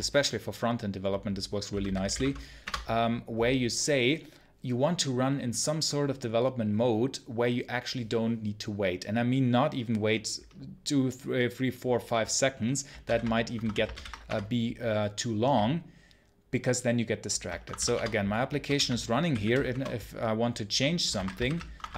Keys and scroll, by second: 2.5 Return, 14.1 Return, 17.8 Return.